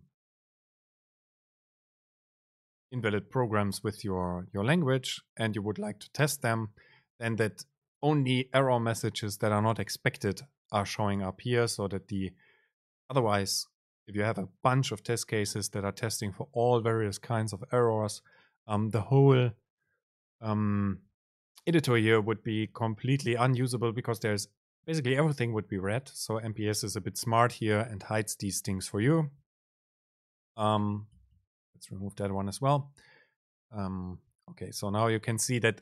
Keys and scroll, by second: 31.3 BackSpace.